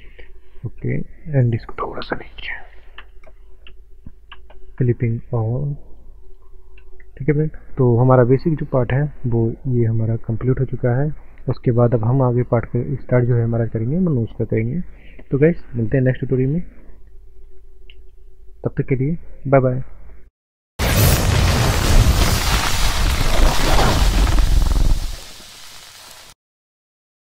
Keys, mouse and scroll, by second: 0.3 shift+middle click, 1.7 click, 2.9 ctrl+space, 5.9 click, 6.8 ctrl+space, 7.3 middle click, 7.7 scroll down 1, 7.9 middle click, 10.8 click, 11.7 middle click, 12.4 scroll up 1, 12.9 shift+middle click, 15.5 click, 18.3 middle click.